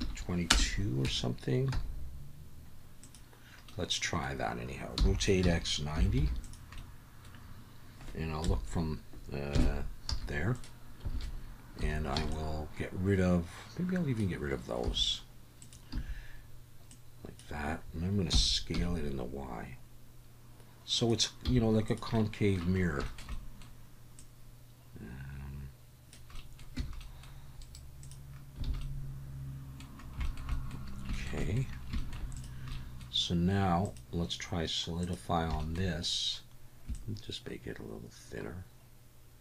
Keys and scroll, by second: 0.0 2, 1.1 Tab, 1.7 s, 5.0 r, 5.4 x, 5.9 9, 6.2 0, 8.4 KP_1, 9.5 KP_3, 10.1 z, 11.1 alt+a, 11.8 1, 12.2 b, 14.8 x, 15.9 a, 18.3 s, 18.7 y, 21.5 z, 26.8 Tab, 28.7 alt+a.